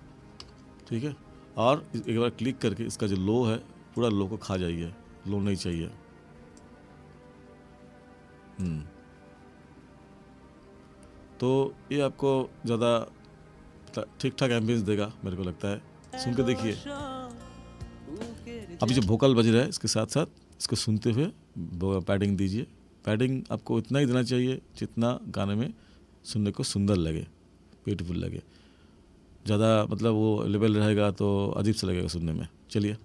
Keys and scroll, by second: 18.9 space.